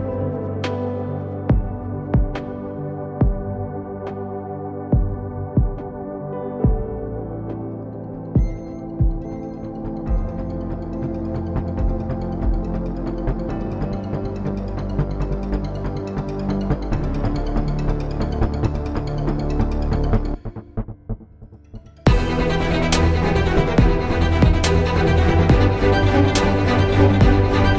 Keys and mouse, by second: 2.5 KP_0, 3.6 shift+q.